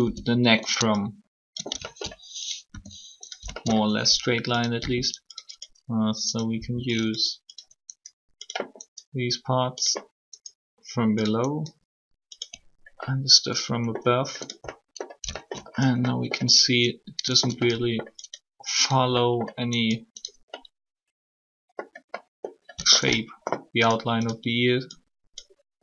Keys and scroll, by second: 1.7 ctrl+s, 2.7 alt+r, 3.4 s, 4.8 alt+r, 6.5 r.